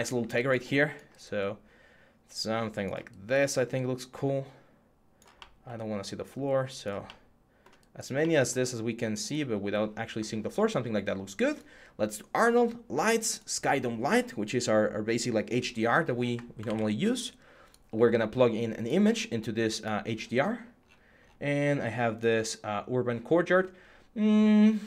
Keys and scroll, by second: 16.4 ctrl+a.